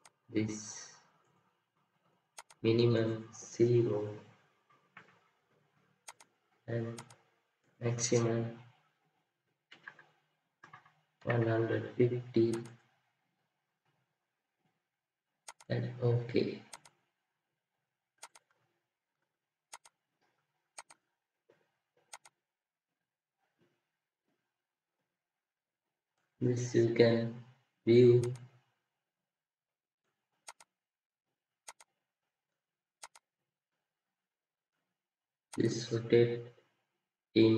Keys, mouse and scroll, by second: 4.7 typing, 9.6 typing, 18.5 scroll, 18.5-19.0 scroll up 1, 19.4 typing.